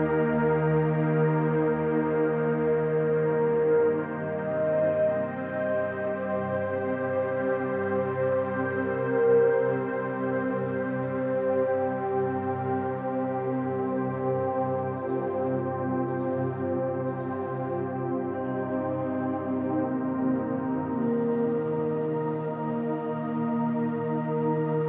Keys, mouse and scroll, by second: 0.6 click, 2.5-3.5 drag, 6.0 middle click, 7.2 click, 7.8-9.5 middle drag, 9.8-10.7 middle drag, 11.6 KP_7, 12.8 KP_3, 13.9 scroll up 1, 14.3-15.0 shift+middle drag, 16.3 Tab, 17.5 alt+z, 20.8 3, 22.6-24.5 drag.